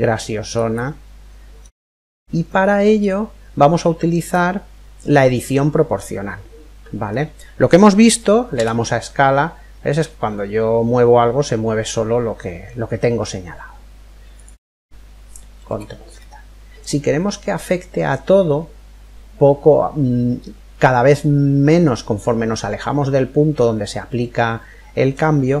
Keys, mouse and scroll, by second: 2.1-3.9 middle drag, 5.0-6.8 middle drag, 8.1 s, 15.8-17.7 ctrl+middle drag, 23.5-25.6 middle drag.